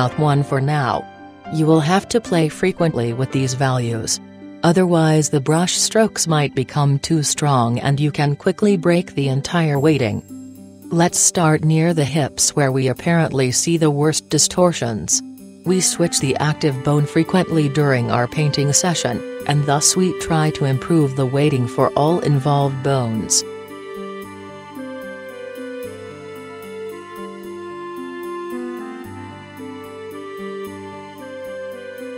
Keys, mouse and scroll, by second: 2.5-3.6 drag, 7.1-18.3 drag, 11.8-13.4 middle drag, 18.5 middle click, 18.7-21.0 right drag, 20.0-32.1 drag.